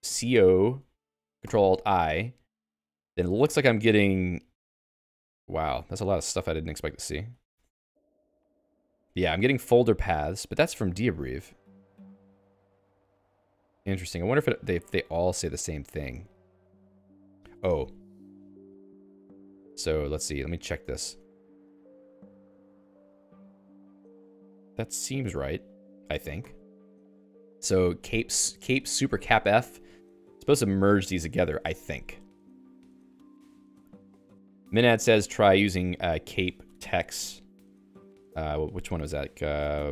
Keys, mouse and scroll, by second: 0.0-0.7 typing, 1.5 ctrl+alt+i, 4.8 Down, 5.1 Down, 5.7 Down, 6.4 Down, 6.5 Down, 6.6 Down, 8.6 Down, 10.5 Down, 10.9 Down, 11.1 Down, 11.4 Page_Down, 12.0 Page_Down, 12.5 Page_Down, 13.2 Page_Down, 13.7 Page_Down, 14.1 Page_Down, 14.6 Page_Down, 15.1 Page_Down, 15.5 Page_Down, 15.9 Page_Down, 16.3 Page_Down, 16.6 Page_Up, 16.8 Page_Up, 16.9 Page_Up, 17.4 Escape, 17.9-20.8 typing, 23.2 Return, 26.1-30.7 typing, 33.2 Escape, 33.8-36.4 typing, 35.2 alt+x, 36.7 Escape, 37.8 Escape.